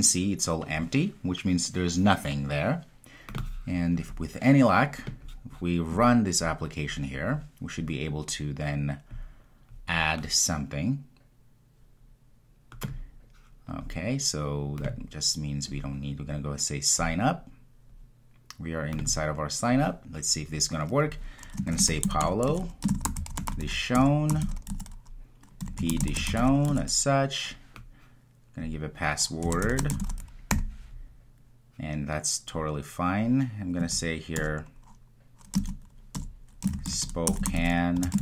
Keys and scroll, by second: 9.3 ctrl+r.